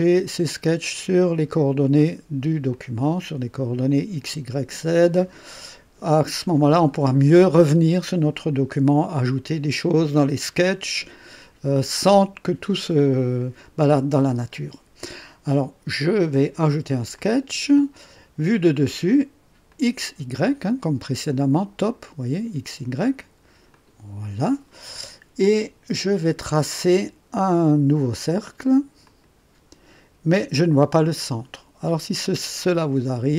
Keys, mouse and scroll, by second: 2.7-3.5 drag, 12.0-12.8 drag, 17.1 click, 19.7 click, 21.7 click, 23.7 click, 29.0 click.